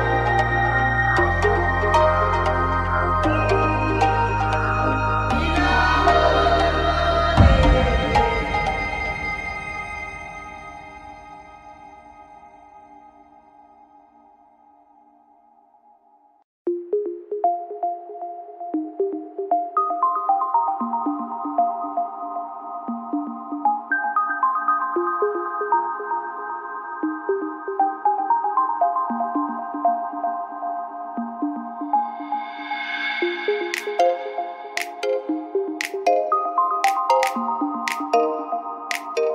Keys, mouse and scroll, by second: 0.3 f, 0.4 a, 1.0 right click, 3.1 f, 3.1 a, 3.2-7.4 right drag, 4.6 f, 4.6 a, 7.0 f, 7.1 a, 8.4 middle click, 11.8 click, 12.3 right click, 12.6 x, 14.4 middle click, 15.6 click, 17.3 middle click, 22.6-25.3 right drag, 25.3 f, 25.3 a, 25.9 middle click, 26.7-28.7 right drag, 27.7 click, 28.2 x, 29.2 right click, 29.8 middle click, 29.8 click, 30.0 middle click, 30.2-32.2 right drag, 32.1 f, 32.2 a, 32.8-35.6 right drag, 35.6 middle click, 36.1 f, 36.1 a, 36.9 click, 37.3-38.7 right drag, 38.7 click, 38.7 f, 38.8 a.